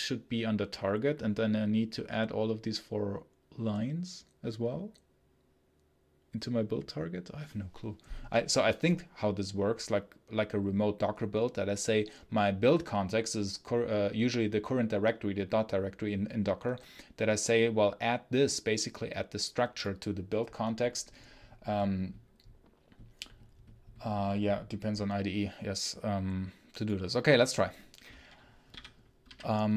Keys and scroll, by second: 28.6 k, 29.1 j.